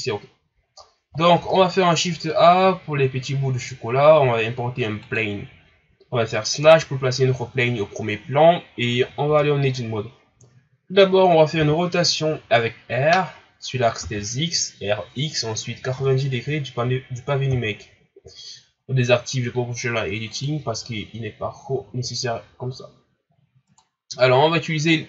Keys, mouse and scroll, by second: 1.3 shift+a, 6.6 KP_Divide, 9.2 Tab, 11.6 r, 20.3 click, 21.1-21.8 scroll down 1, 21.8-22.6 scroll down 1, 22.6-23.6 scroll down 1, 23.6 right click.